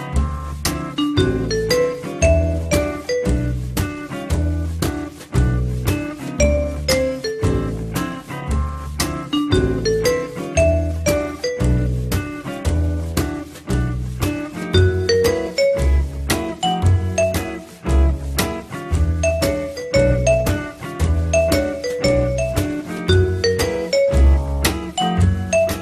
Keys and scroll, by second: 7.8 alt+l, 9.7 ctrl+z, 25.3 alt+l.